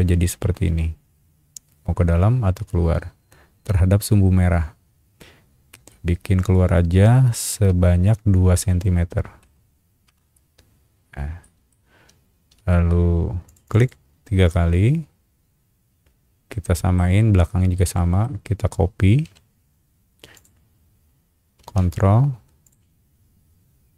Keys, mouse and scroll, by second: 9.4 KP_2, 10.0 KP_Enter, 11.1 scroll down 1, 11.4 middle click, 12.6 space, 13.4 click, 13.6 click, 13.8 click, 14.5-16.9 middle drag, 17.7 middle click, 19.2 m, 20.3 click, 22.6 ctrl+click.